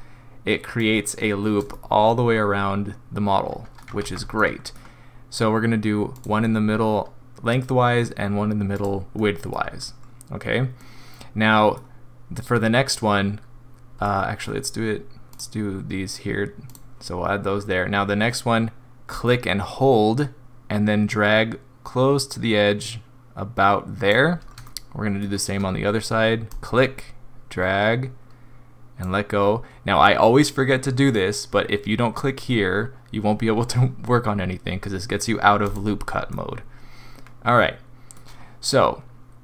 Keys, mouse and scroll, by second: 0.9 click, 1.7 middle click, 2.5 middle click, 2.7 middle click, 4.0 ctrl+z, 4.4 middle click, 6.1 click, 8.8 click, 9.2 middle click, 9.8 scroll up 2, 10.8 middle click, 14.1 middle click, 15.3 click, 16.7 click, 18.0-19.1 scroll up 2, 19.1 click, 24.7 shift+middle click, 26.5 click, 35.6 click, 36.3 middle click, 37.9 middle click.